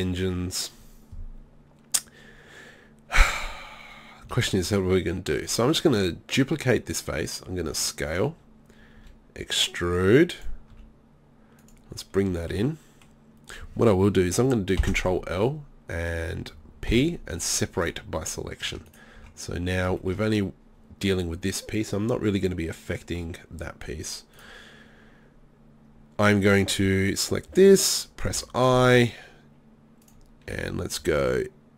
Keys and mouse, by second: 4.4 shift+d, 4.8 click, 7.6 s, 8.2 click, 9.0 e, 10.5 click, 10.8 s, 14.8 ctrl+l, 16.9 p, 18.7 Tab, 18.9-19.2 right drag, 19.2 Tab, 23.0-24.0 middle drag, 24.4-28.3 right drag, 28.3 i, 30.2-31.7 drag.